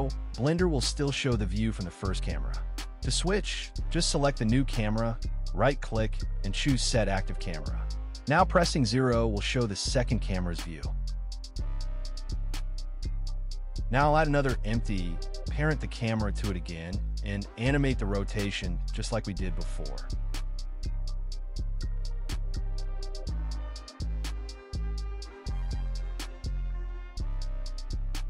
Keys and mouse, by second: 1.1 g, 1.4 z, 3.2 r, 3.7 x, 3.8 x, 8.8 g, 9.1 z, 11.3 g, 11.6 x, 13.7 g, 14.0 z, 14.5 z, 15.0 click, 15.5 s, 15.8 drag, 16.0 ctrl+s, 16.4 click, 16.6 click, 17.0 shift+a, 17.7 2, 18.1 ctrl+z, 18.4 F2, 20.8 click, 21.2 F2, 21.7 BackSpace, 21.9 BackSpace, 22.5 middle click, 22.9 click, 23.1 middle click, 23.3 s, 24.1 shift+middle click, 25.2-26.7 drag, 26.7 shift+click, 27.0 click, 27.8 click.